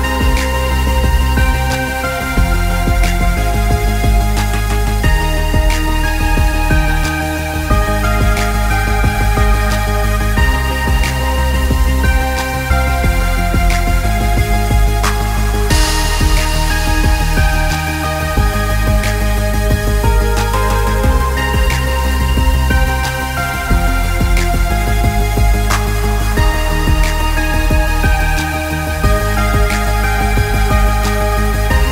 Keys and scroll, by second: 0.8 ctrl+shift+z, 18.5 ctrl+x, 21.7 ctrl+z, 22.1 Escape, 27.3 ctrl+v, 27.9 ctrl+t.